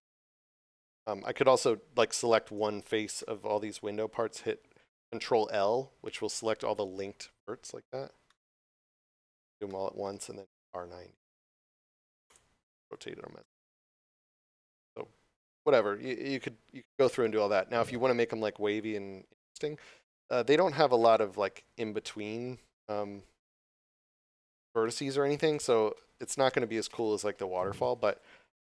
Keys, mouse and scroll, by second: 2.4 right click, 3.6 scroll up 1, 7.4 scroll down 1, 8.8 scroll up 1, 9.7 shift+middle click, 10.6 r, 12.2 Return, 13.3 middle click, 14.3 scroll down 1, 14.8 scroll up 1, 14.9 scroll down 1, 16.6 scroll down 1, 17.1 middle click.